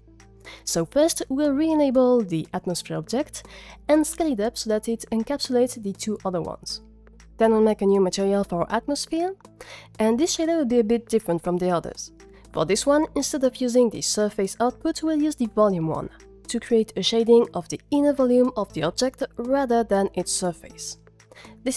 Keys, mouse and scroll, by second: 1.9-2.5 drag, 2.8 z, 3.2 s, 4.2 click, 5.0 z, 7.2 click.